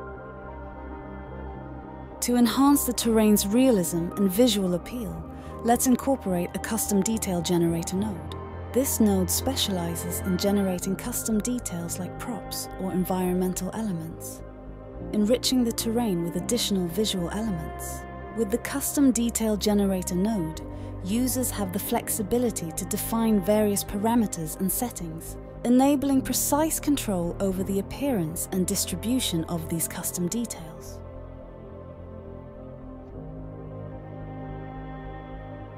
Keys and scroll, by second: 0.0-1.6 typing, 3.4-4.2 typing, 5.5 Return, 12.9-13.9 typing, 14.1 Down, 14.4 Return, 28.3-29.6 typing.